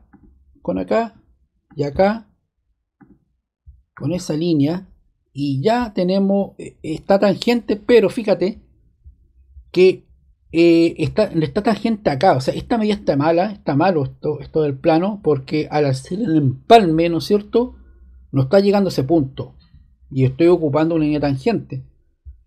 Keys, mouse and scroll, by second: 0.0 click, 1.6 click, 2.9 click.